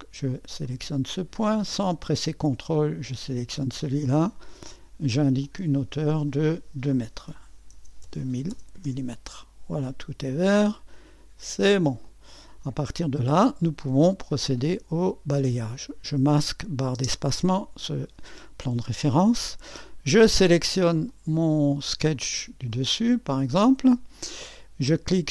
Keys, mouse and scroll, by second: 7.0-8.5 typing, 8.8 Return, 10.9-17.0 drag, 15.7 typing, 17.0 space, 21.1-25.3 drag.